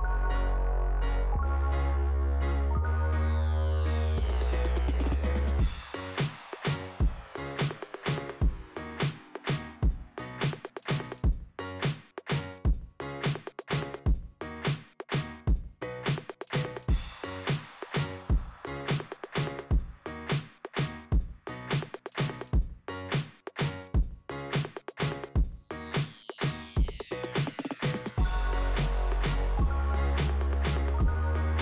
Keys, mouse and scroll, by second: 0.7 click, 0.7 scroll down 1, 0.9 click, 1.1 Return, 2.7 click, 2.9 click, 5.4 click, 9.4 click, 10.1 click, 11.1 click, 11.5 click, 12.4 double click, 13.2 click, 14.3 click, 16.1 click, 16.8 click, 18.1 click, 18.2 click, 19.8 click, 21.2 click, 24.6 scroll down 1, 26.2 click, 29.1 click, 30.0 click, 30.4 click, 30.5 click, 30.6 double click.